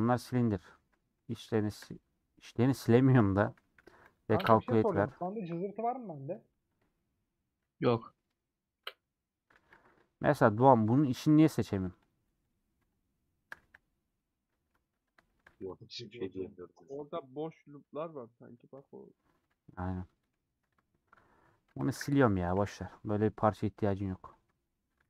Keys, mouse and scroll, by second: 0.0 middle click, 0.7 3, 2.5 middle click, 3.1 a, 4.5 middle click, 4.8 3, 5.4 alt+click, 6.2 alt+click, 6.9-7.9 middle drag, 7.9 Tab, 8.1 click, 9.1 middle click, 9.6 alt+z, 10.0 middle click, 10.9 alt+z, 11.6-13.8 alt+drag, 13.8 c, 14.4 middle click, 14.8 1, 15.2 shift+middle click, 15.6-17.6 drag, 18.8-19.6 scroll down 2, 19.6 Tab, 19.6-21.8 middle drag, 21.8 shift+click, 22.0 x, 22.8 /, 23.2 scroll down 3, 23.4 middle click, 24.5 shift+click.